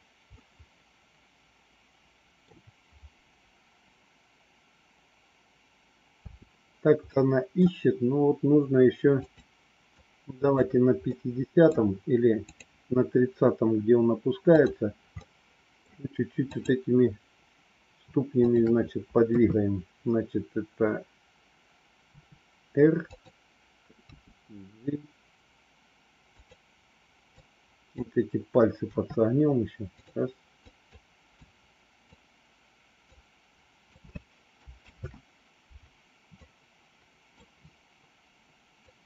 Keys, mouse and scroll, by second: 0.3-2.4 middle drag, 6.2 space, 7.1 middle click, 9.2 click, 9.9 click, 11.1 middle click, 12.3 click, 14.4 click, 15.2 middle click, 16.4 click, 19.2 KP_3, 22.0 r, 24.0 g, 27.2 click, 28.8 r, 30.7-32.2 drag, 33.0 click, 34.8 ctrl+z, 36.3 click, 38.8-39.0 drag.